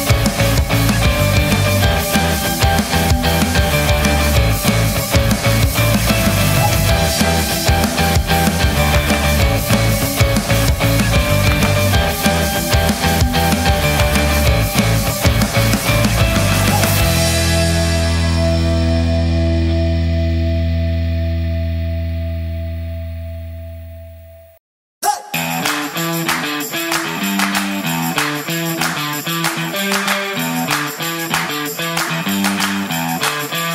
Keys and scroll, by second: 29.2 Delete, 32.8 Delete.